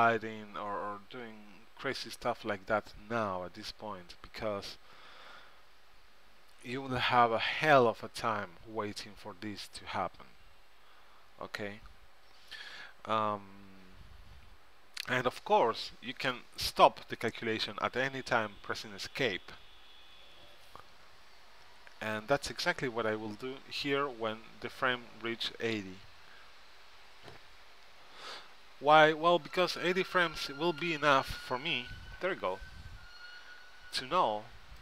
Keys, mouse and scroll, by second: 31.7 Escape.